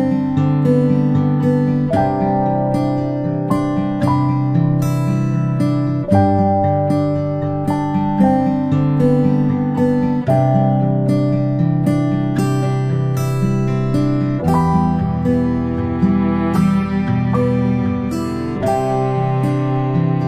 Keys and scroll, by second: 7.4 ctrl+i, 14.6-15.0 ctrl+space, 16.2-16.7 space, 19.7-20.2 typing.